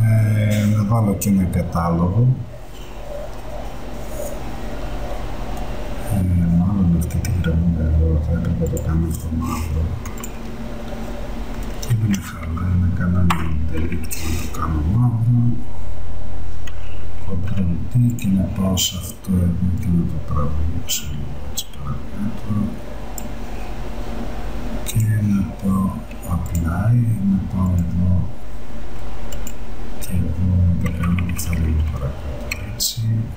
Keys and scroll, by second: 12.2 x, 13.4 alt+Delete, 17.4 ctrl+d, 31.0 Down.